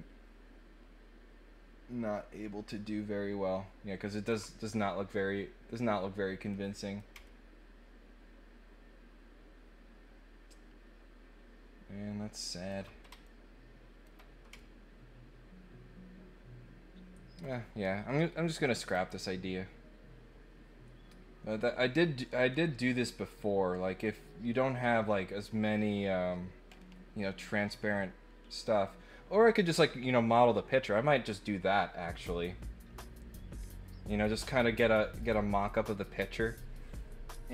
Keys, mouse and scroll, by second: 6.5 middle click, 7.2-12.7 ctrl+middle drag, 13.2 shift+middle click, 14.5-17.4 ctrl+middle drag, 18.9 click.